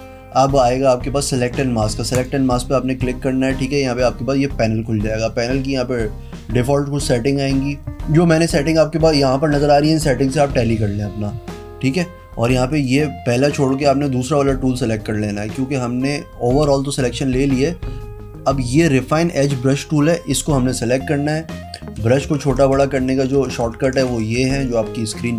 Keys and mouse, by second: 2.3 click, 7.3 click, 12.8 click, 13.7 click, 22.1-25.3 typing.